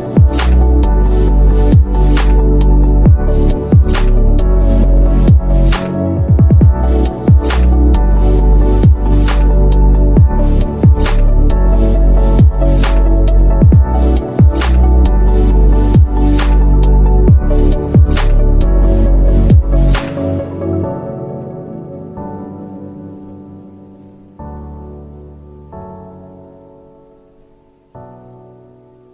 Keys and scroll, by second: 9.4 ctrl+z, 17.9 Escape.